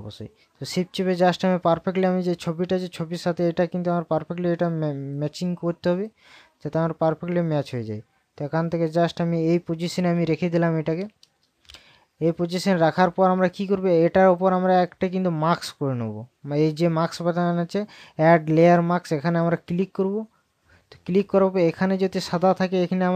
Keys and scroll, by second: 12.4 ctrl+KP_Add.